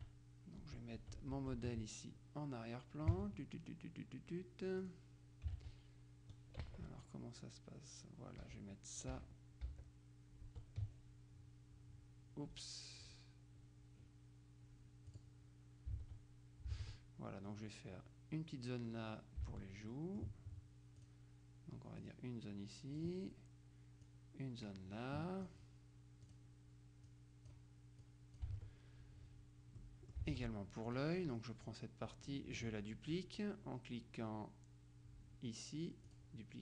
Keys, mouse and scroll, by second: 0.8 Tab, 5.0 click, 5.9 alt+Tab, 6.8 Left, 8.6 Down, 9.2 Up, 9.9 Down, 10.6 Tab, 13.2 click, 15.2 click, 16.2 alt+Tab, 17.0 alt+Tab, 19.6 alt+Tab, 20.0 alt+click, 21.1 click, 22.1-23.6 drag, 24.2-26.0 drag, 26.4 click, 27.2 click, 28.6 alt+click, 28.7 alt+Tab, 29.8 middle click, 30.2 alt+click, 30.4 alt+Tab, 30.4 alt+middle click, 31.0 click, 31.8-33.2 drag, 36.2 click.